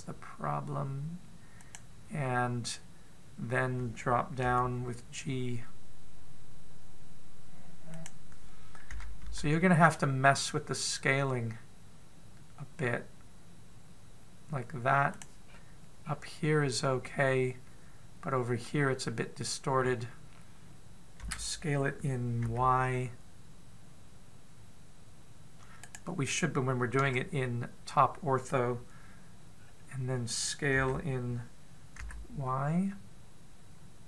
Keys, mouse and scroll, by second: 5.3 g, 9.8 s, 16.3-16.8 scroll down 3, 16.8-17.6 scroll up 1, 17.6-19.5 scroll down 1, 22.1 s, 27.8 KP_7, 30.5-31.0 scroll up 1, 31.6 s.